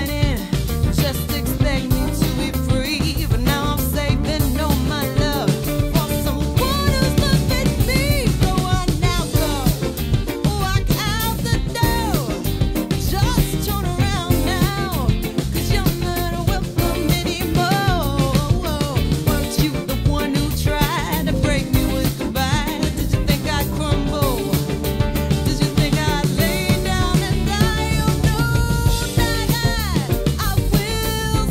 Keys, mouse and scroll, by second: 0.0-5.7 drag, 6.7-12.4 drag, 12.4 5, 15.0-16.2 drag, 16.0-17.1 typing, 19.6-27.4 drag, 28.7-31.5 drag.